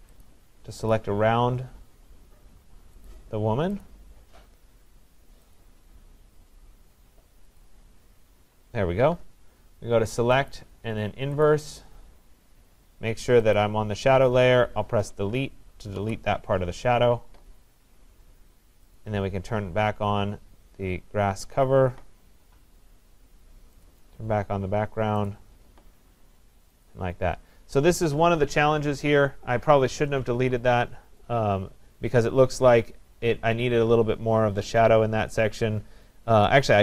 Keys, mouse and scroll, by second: 0.3 click, 0.9 click, 3.1 click, 3.9 click, 5.6 click, 7.7 click, 10.5 click, 11.5 click, 13.6 click, 16.0 Delete, 19.0 click, 23.9 click, 25.3 click, 26.9 click, 30.5 ctrl+z.